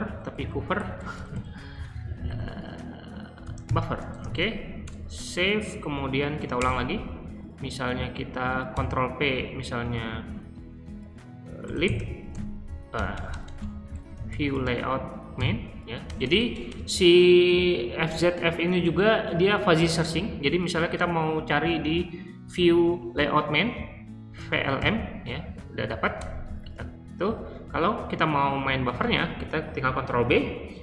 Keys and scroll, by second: 0.0-6.4 typing, 6.5 Return, 8.6 ctrl+p, 11.3-16.6 typing, 24.1-25.2 typing, 26.1 Return, 28.8 ctrl+b.